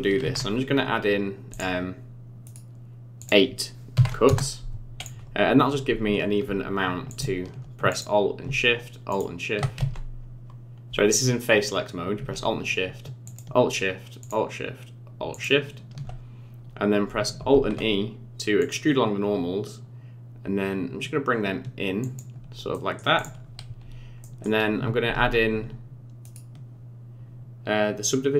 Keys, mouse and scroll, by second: 0.2 ctrl+r, 3.2 click, 5.0 click, 5.8 Tab, 7.1 alt+click, 7.9 click, 9.1 alt+shift+click, 9.8 ctrl+z, 13.2 alt+shift+click, 14.2 alt+shift+click, 15.3 alt+shift+click, 17.5 alt+e, 22.7 middle click, 23.1 click, 24.2 middle click, 25.0 ctrl+r.